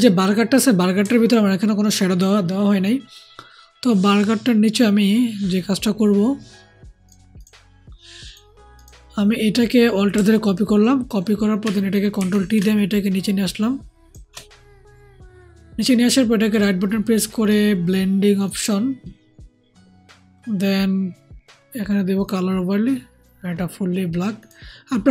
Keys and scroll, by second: 12.1 ctrl+alt+t.